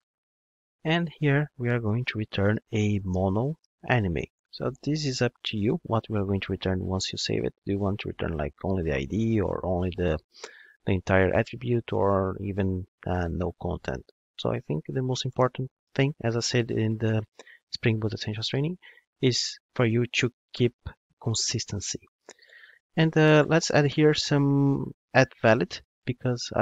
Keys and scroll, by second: 4.8 Return, 5.8 Return, 25.0 Return.